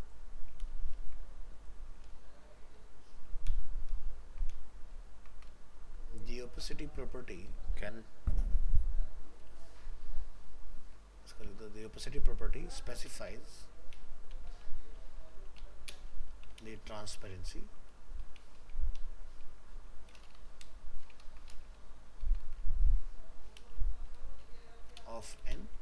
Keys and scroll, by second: 0.6 ctrl+v, 3.5 ctrl+BackSpace, 4.9 ctrl+Right, 21.2 ctrl+Left.